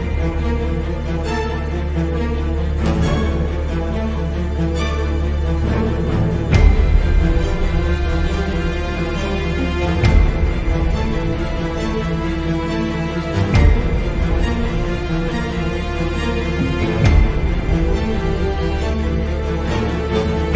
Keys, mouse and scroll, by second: 0.0 x, 6.6 click, 10.7 click, 12.1 click.